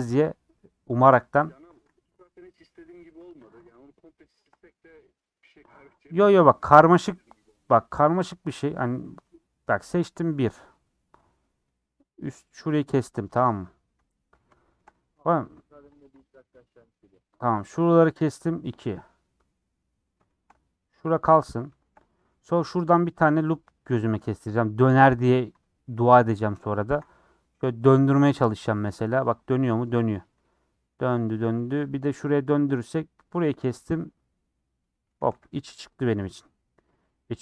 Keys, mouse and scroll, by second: 1.7 ctrl+click, 2.0 middle click, 3.2-4.3 middle drag, 4.3 shift+click, 5.6-6.7 middle drag, 6.7 scroll down 4, 7.5 middle click, 7.8 scroll up 3, 8.0 scroll down 1, 8.1 scroll up 1, 8.6-13.5 middle drag, 13.5 click, 13.8 middle click, 14.1-14.5 scroll up 6, 14.5-15.9 shift+middle drag, 15.9 ctrl+click, 16.2 scroll down 2, 16.3 middle click, 17.4 click, 18.5 scroll down 2, 18.6-22.3 middle drag, 22.3 scroll up 1, 22.8 click, 23.1-25.3 middle drag, 25.3 ctrl+Left, 25.7-26.8 middle drag, 26.8 ctrl+Left, 27.1-28.6 middle drag, 28.6 ctrl+click, 28.9-30.2 middle drag, 30.2 ctrl+click, 30.4-32.3 middle drag, 32.3 ctrl+click, 33.5 scroll down 1, 33.7-35.3 middle drag, 35.3 a, 35.5 u, 37.1-37.4 middle drag.